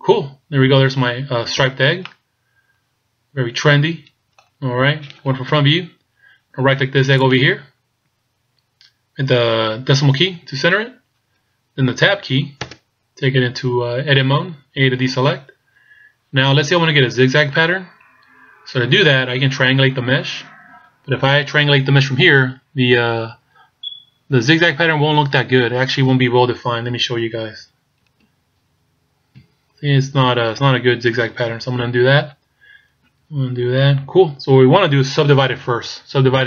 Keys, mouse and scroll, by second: 0.5-1.7 scroll up 6, 1.7-2.2 scroll down 2, 2.2 middle click, 5.5 KP_1, 7.3 right click, 10.3 KP_Decimal, 12.7 Tab, 15.0 a, 27.0 a, 28.4 ctrl+t, 29.5 a, 32.0 ctrl+z, 33.4 ctrl+z.